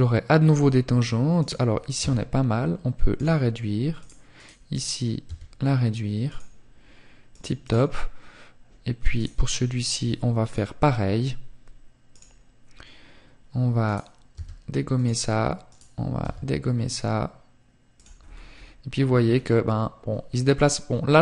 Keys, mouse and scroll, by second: 5.9 click, 7.4 right click, 8.7 click.